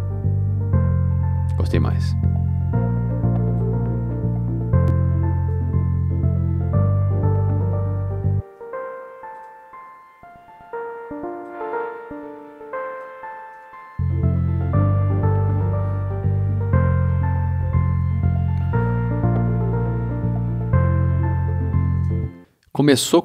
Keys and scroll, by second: 2.0 c, 8.2 s, 13.5 c, 14.8 s, 21.9 space.